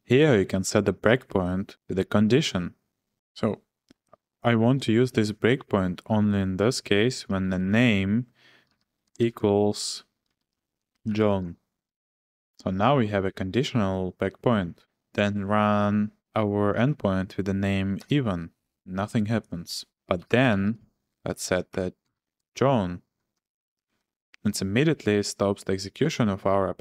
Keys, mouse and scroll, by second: 3.1 shift+b, 7.0-12.4 typing, 14.0 Return, 15.3 click, 18.0 Return, 19.8 click, 20.2-24.5 typing.